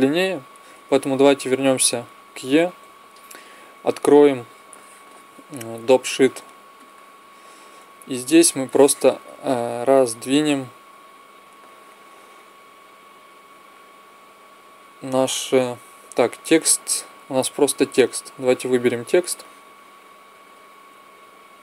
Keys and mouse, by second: 0.6 Escape, 7.1 click, 7.9-10.3 middle drag, 13.5-15.2 drag, 19.1-21.0 drag.